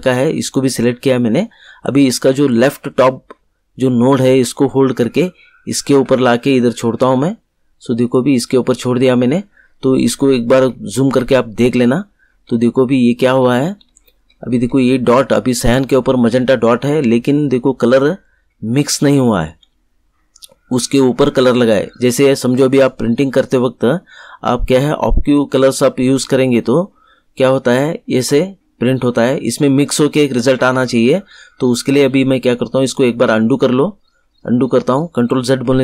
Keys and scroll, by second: 35.7 ctrl+z.